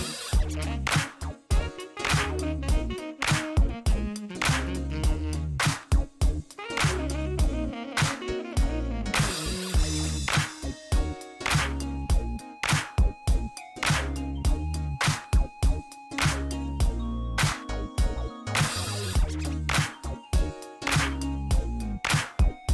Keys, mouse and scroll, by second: 0.0-0.4 typing, 1.4 click, 3.1 click, 5.3 click, 6.4 click, 8.2 click, 9.7 click, 10.9 middle click, 11.9 scroll up 2, 13.2 scroll down 1, 15.6 click, 16.6-17.1 scroll down 2, 17.4 middle click, 17.8 scroll up 1, 18.2 middle click, 20.1 click, 20.5 click, 22.1 middle click.